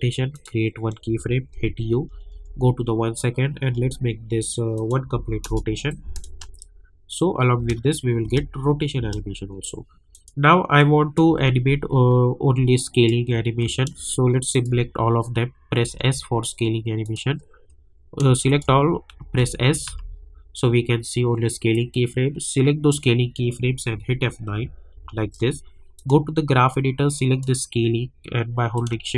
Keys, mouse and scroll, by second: 0.3 click, 1.5-2.8 typing, 4.7 click, 5.4 Return, 5.9 click, 6.2 space, 10.1 click, 11.5 scroll down 1, 12.9 click, 13.3 scroll up 1, 14.5 shift+click, 14.9 scroll down 1, 15.8 s, 17.0 click, 17.3 scroll up 1, 18.4 shift+click, 19.2-19.8 typing, 20.4 scroll down 1, 21.7-24.9 drag, 24.9 F9, 25.9-29.1 drag.